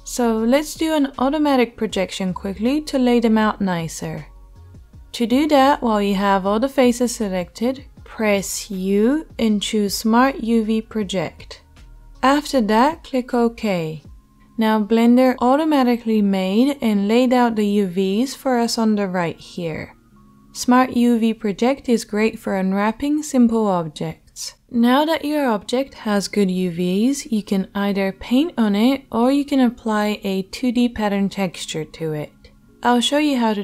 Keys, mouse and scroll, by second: 9.0 u.